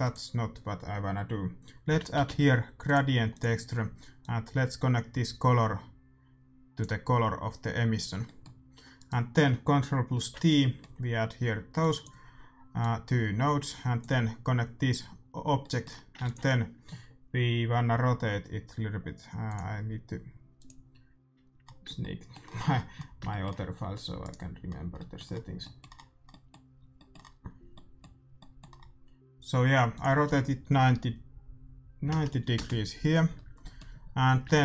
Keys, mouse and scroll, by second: 4.1-6.1 drag, 8.2 middle click, 8.9-11.7 right drag, 10.1 ctrl+t, 11.7-15.5 drag, 15.5-17.5 middle drag, 16.2 ctrl+s, 29.9-31.8 drag, 33.6-34.6 middle drag, 34.4 shift+a.